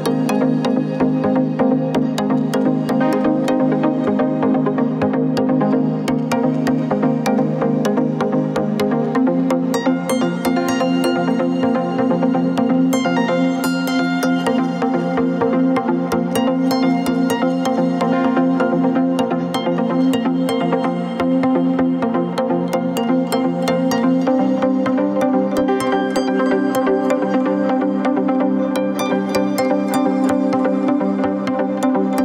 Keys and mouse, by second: 1.8-9.3 middle drag, 11.3 alt+h, 15.4 shift+h, 17.7 shift+h, 18.6 middle click, 19.2 Tab, 20.0-22.0 middle drag, 22.2 Tab, 24.0 click, 24.7-25.3 drag, 25.3 Tab, 25.8 Tab, 26.8-30.6 middle drag, 30.6 Tab, 31.3 Tab.